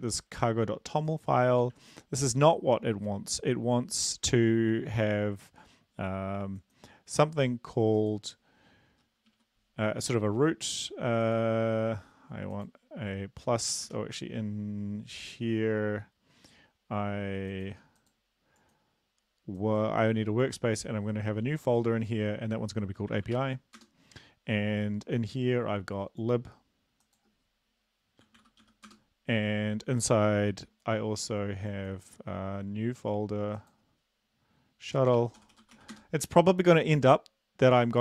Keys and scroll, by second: 2.7 ctrl+`, 14.7 Escape, 23.7-24.7 typing, 29.7 typing, 35.7-36.7 typing, 36.7 Return.